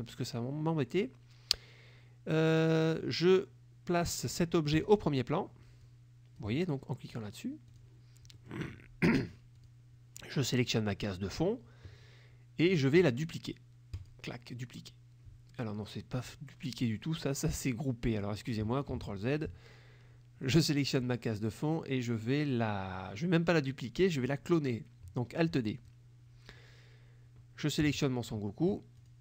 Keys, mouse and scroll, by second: 4.8 click, 5.9 click, 7.8 click, 8.5 click, 9.7 click, 14.1 click, 19.0 ctrl+z, 20.5 click, 25.9 click, 28.0 shift+click, 29.1 click.